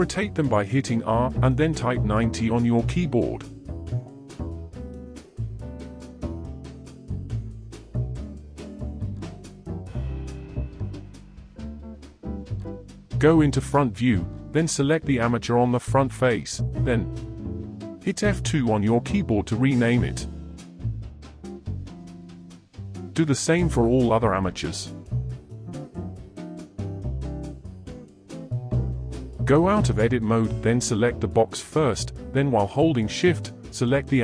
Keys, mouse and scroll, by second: 1.2-4.3 middle drag, 5.0 click, 5.9-9.0 middle drag, 9.3 shift+middle click, 9.5 click, 11.5 KP_1, 13.0-14.1 shift+middle drag, 14.1 click, 17.1 F2, 22.4 click, 23.2 F2, 24.5 click, 25.0 F2, 26.1 middle click, 26.4 click, 26.9 F2, 28.2-29.3 shift+middle drag, 29.3 Tab, 30.1 click, 31.2 KP_1, 33.5-34.2 middle drag.